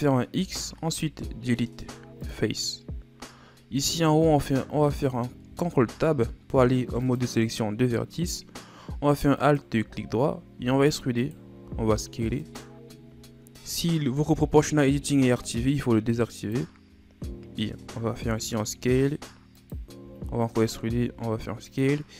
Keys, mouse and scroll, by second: 0.4 x, 4.3 alt+right click, 5.5 ctrl+Tab, 9.5 alt+right click, 10.6 e, 11.7 s, 16.5 click, 18.2 s, 20.0 e, 21.0 s.